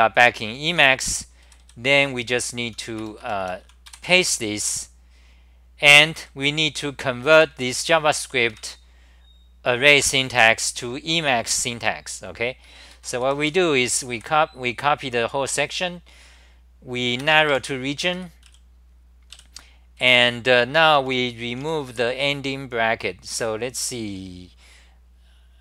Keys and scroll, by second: 0.3-3.9 typing, 3.2 Return, 3.4 Return, 6.0 d, 8.2 r, 8.5 6, 12.9 ctrl+g, 13.2 d, 13.9 h, 14.1 1, 17.5 BackSpace, 18.1 ctrl+g, 18.5 w, 20.9 t, 21.0 t, 21.6 s.